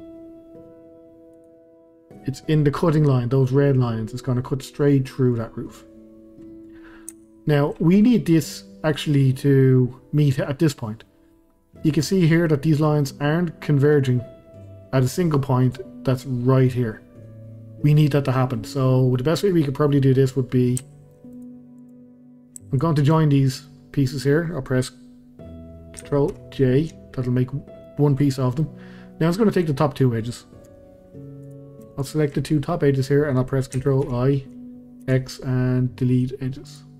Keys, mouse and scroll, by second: 1.3 click, 2.2-5.6 scroll up 1, 6.7-7.1 scroll up 1, 7.1-7.8 shift+middle drag, 7.8-11.4 scroll up 2, 11.4-11.8 scroll up 1, 18.3-19.5 scroll down 2, 19.5-20.5 middle drag, 20.5 scroll down 2, 20.8-21.3 shift+middle drag, 21.3 click, 21.8 click, 22.7 shift+click, 23.1-23.8 middle drag, 23.8-26.3 scroll up 1, 26.3 ctrl+j, 27.4-29.6 middle drag, 29.6 click, 30.7 Tab, 31.4 click, 32.0 shift+click, 32.4-34.0 middle drag, 34.0 ctrl+i, 35.0 x.